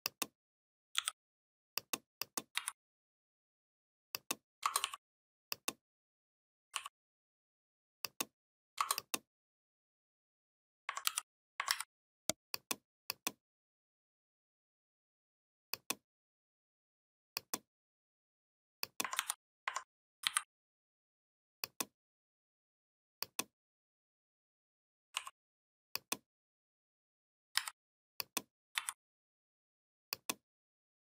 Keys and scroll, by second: 0.8 i, 2.4 v, 10.9 ctrl+g, 11.5 ctrl+a, 18.9 ctrl+c, 20.0 ctrl+b, 27.3 a, 28.5 v.